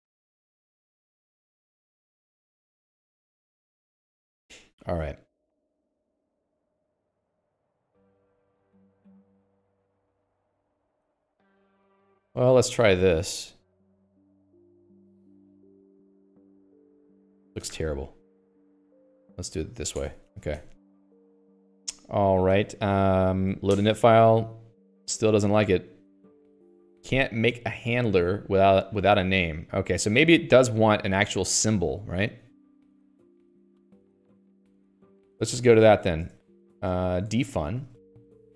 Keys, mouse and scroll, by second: 3.5 Escape, 4.4 click, 6.1-20.1 typing, 17.1 ctrl+s, 17.3 Escape, 20.3 Return, 20.4 Escape, 20.7 ctrl+s, 20.9 Escape, 34.0 Escape, 34.4 Escape, 34.5 Escape, 34.6-36.1 typing, 36.6 Return, 37.4 Delete, 37.6 Return, 37.7-38.5 typing.